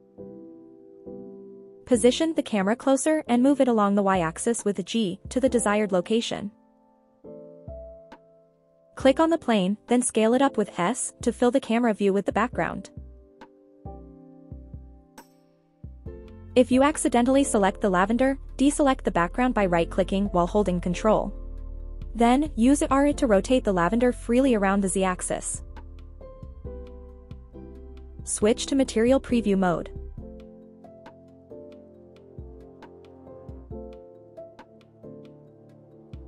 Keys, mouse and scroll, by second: 0.7 scroll down 2, 1.6-2.1 scroll up 2, 2.1-2.8 scroll down 1, 2.8-3.5 scroll down 3, 3.9-4.7 scroll up 4, 6.0 click, 7.9 g, 8.1 z, 10.7 click, 12.0 click, 14.0 s, 17.0 click, 17.4-17.8 scroll down 2, 17.9-18.6 scroll up 1, 18.6 click, 20.4 ctrl+click, 21.7 r, 22.0 z, 24.2 click, 25.1-25.7 scroll down 4, 25.7-26.0 scroll up 1, 26.0 click, 26.6-27.1 scroll up 2, 27.1 scroll down 1, 27.6-28.2 scroll up 1, 28.7-29.0 scroll down 1, 30.7 click, 32.7-34.0 scroll up 4, 34.0-34.7 scroll down 3, 34.7-35.6 scroll up 4.